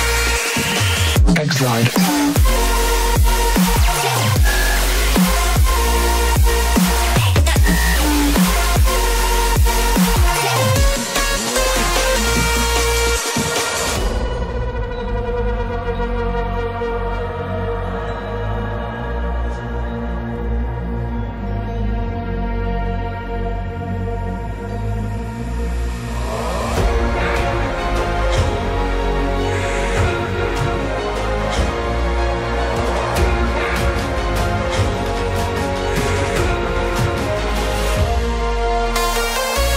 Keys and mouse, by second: 3.6 click, 4.3-5.8 middle drag, 7.0-8.2 shift+middle drag, 9.6 Tab, 12.5 ctrl+l, 14.4 click, 15.2 click, 16.9-22.8 drag, 24.9 click, 26.2 click, 35.3-37.9 middle drag.